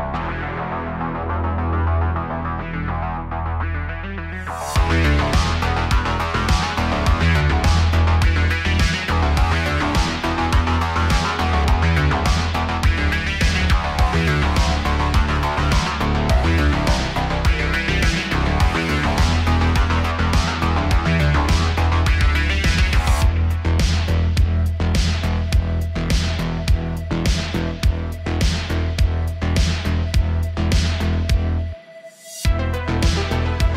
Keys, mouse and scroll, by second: 0.8 click, 2.1 click, 2.7 click, 3.6-6.3 drag, 6.4 click, 7.3-8.9 drag, 8.9 scroll down 1, 9.0 middle click, 9.4-10.2 scroll up 1, 10.2-10.8 drag, 10.8-13.0 right drag, 13.0-13.7 middle drag, 13.7 shift+s, 14.6 middle click, 15.2 click, 15.6 scroll down 2, 15.9 g, 19.2 g, 22.8-24.1 shift+middle drag, 24.1-24.6 scroll up 1, 24.6 shift+a, 25.8 shift+middle click, 26.5 click, 26.9 g, 28.1-28.5 middle drag, 28.5 scroll up 2, 29.7 click, 30.0 shift+middle click, 31.0-33.7 drag.